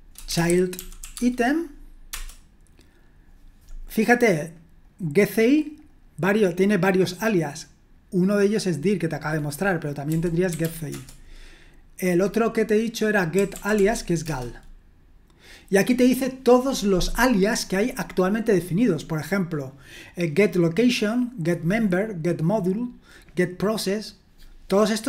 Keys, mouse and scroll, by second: 0.0-2.6 typing, 4.5-6.5 drag, 8.5 click, 9.4 click, 9.8-11.1 typing, 13.3-14.2 typing, 16.7-17.6 scroll up 1, 17.6-18.2 scroll up 1, 18.2-19.4 scroll up 1, 19.4 scroll up 1, 24.8-25.0 scroll down 1.